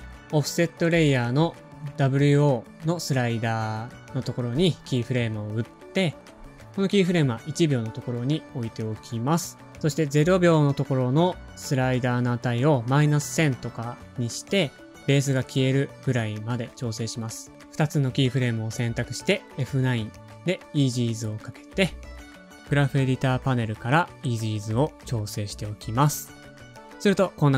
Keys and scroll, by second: 5.6 u, 7.3 alt+shift+Right, 7.5 alt+shift+Right, 19.3 F9, 20.6 shift+F3, 25.3 space, 26.9 space.